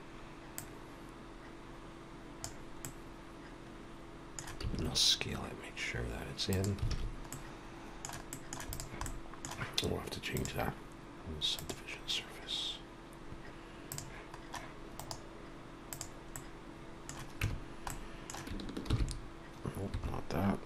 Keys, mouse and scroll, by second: 0.5 click, 0.5 shift+d, 2.7 middle click, 4.5 s, 7.3 alt+a, 7.3 middle click, 8.6 middle click, 8.6 click, 9.0 middle click, 10.3 click, 13.8 click, 14.9 right click, 16.3 middle click, 17.4 Tab, 17.8 middle click, 18.8 ctrl+f.